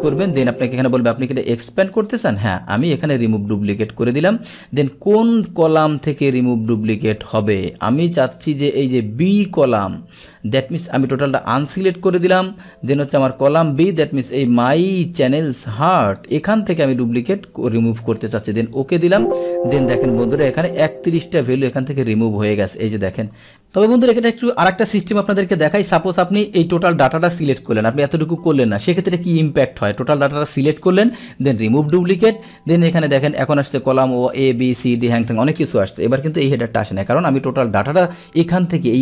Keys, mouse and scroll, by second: 0.0 click, 2.4 click, 11.0 click, 16.2 click, 18.7 click, 20.7 click, 23.5-25.4 scroll, 25.8 click, 27.4 click, 27.7 click, 28.3 click, 28.6 click, 29.9 click, 31.6 click, 33.0 click.